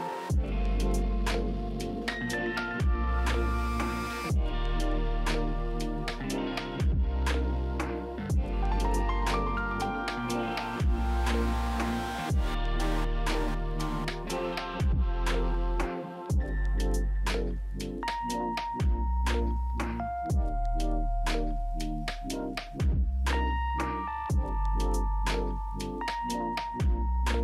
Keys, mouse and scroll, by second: 12.4 right click.